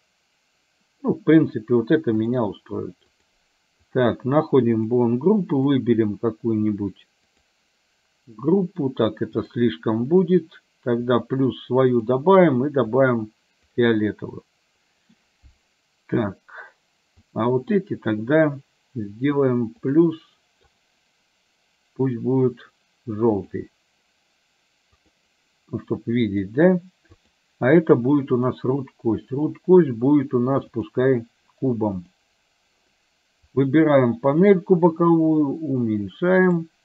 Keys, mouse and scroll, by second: 4.0 click, 4.9 click, 5.6-6.8 drag, 10.2 click, 11.2 click, 12.0-13.2 drag, 13.8 click, 14.3 middle click, 17.3 click, 20.0 click, 20.9-23.7 drag, 25.8 middle click, 28.5-31.0 drag, 33.6 click, 34.5-36.7 drag.